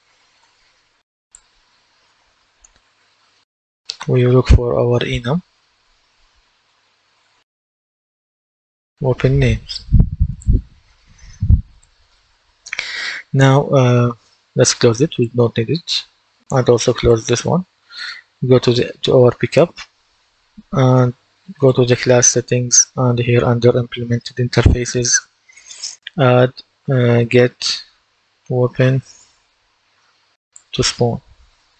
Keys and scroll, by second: 0.0-0.1 typing, 0.3 Return, 2.5-2.8 typing, 6.1-8.3 typing, 26.8-29.8 typing.